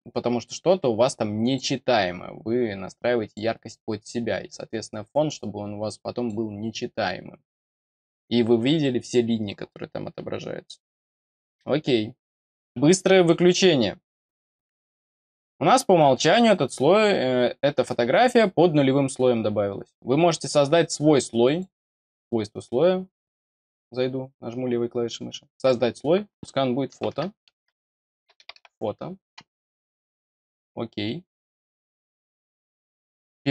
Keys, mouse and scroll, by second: 1.9-3.3 drag, 4.0-6.2 drag, 14.9 click, 16.1 click, 18.0 click, 21.4 click, 22.0 click, 25.5 click, 30.2 click, 30.4 click, 32.5 click, 33.4 click.